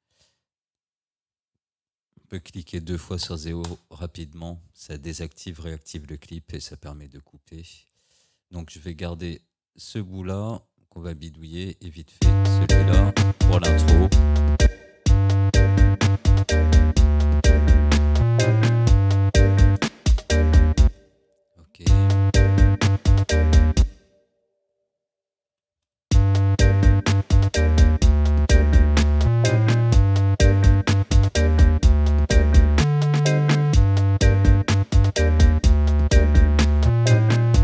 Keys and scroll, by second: 3.2 0, 8.2 Delete, 12.2 space, 14.7 space, 19.8 0, 20.9 space, 23.8 space, 25.5 Delete, 26.1 space.